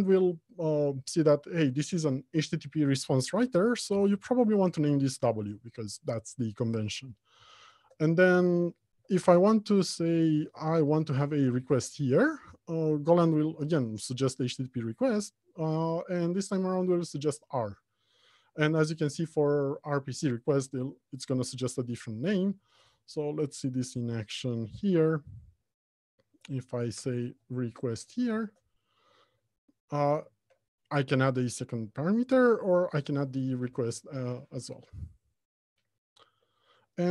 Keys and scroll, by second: 4.3 Return, 23.1 Return, 33.8 Return.